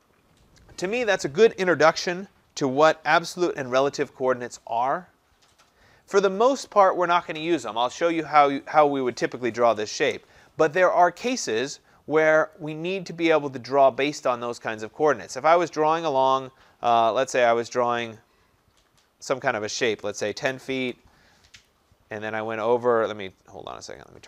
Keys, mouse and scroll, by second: 12.6 click, 18.2 click, 20.2-20.8 typing, 21.7 Return, 21.7 click, 22.6 typing, 24.1 click.